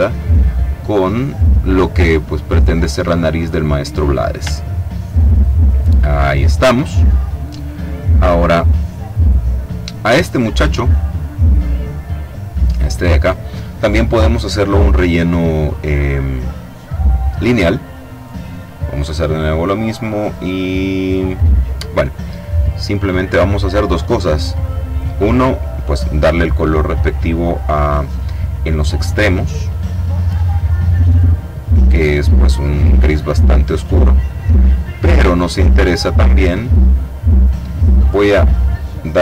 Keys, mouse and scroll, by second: 0.4 click, 0.5-0.9 scroll up 2, 2.2-4.6 drag, 4.6-5.7 ctrl+scroll down 2, 6.1-6.5 ctrl+scroll up 1, 11.4 click, 12.5 click, 17.3 click, 18.0 click, 19.2-21.8 drag, 23.1 click, 24.5 click, 27.5-29.9 drag, 31.1 click, 32.3-34.3 drag.